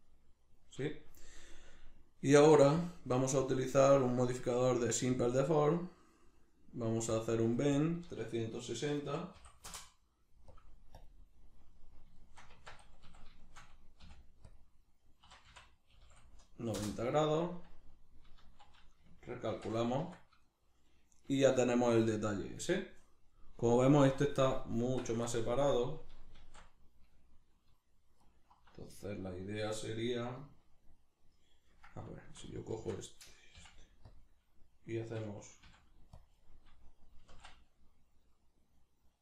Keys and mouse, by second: 2.8-11.7 drag, 9.7 Return, 11.7-14.0 middle drag, 12.5 Tab, 14.0 ., 15.3 r, 19.5 shift+n, 20.0 Tab, 20.5-24.9 middle drag, 24.9 Tab, 25.3-26.4 ctrl+middle drag, 26.4 alt+q, 28.2 alt+right click, 32.5 alt+shift+right click, 33.5 ., 37.2 s.